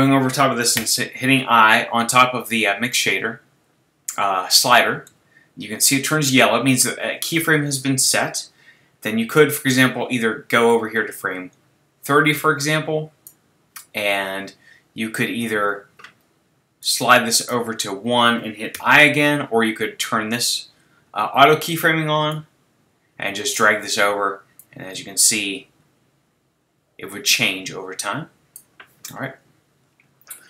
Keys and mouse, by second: 0.8 i, 5.7-15.8 drag, 16.8-18.7 middle drag, 18.7 i, 20.9-22.0 middle drag, 22.3 middle click, 23.2 click, 24.7-26.3 drag.